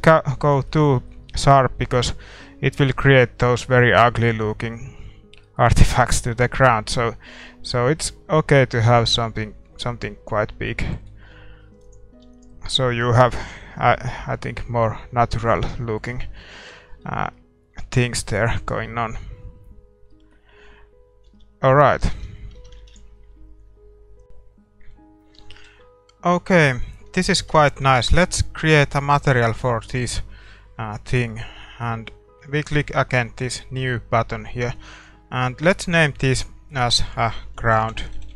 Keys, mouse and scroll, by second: 3.2 scroll up 1, 5.6-7.3 middle drag, 6.7-8.5 drag, 10.7-12.6 middle drag, 12.0-13.7 drag, 12.3 ctrl+s, 13.8-14.3 scroll down 1, 14.3 scroll up 1, 14.6-16.1 middle drag, 16.2-21.8 middle drag, 21.4 shift+z, 22.0 a, 22.2 a, 22.5 a, 24.2 click, 25.5-27.8 middle drag, 25.8 shift+z, 28.4 shift+z, 29.8-33.5 right drag, 31.5-33.5 middle drag, 33.5-38.3 drag.